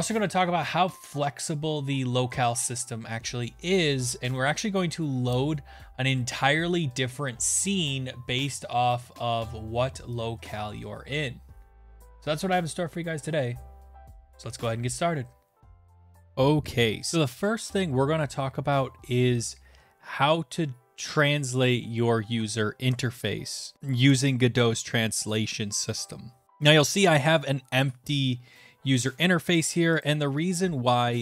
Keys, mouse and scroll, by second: 1.6 click, 4.8 click, 5.8 click, 7.9 click, 9.8 click, 15.6 click, 30.1 click.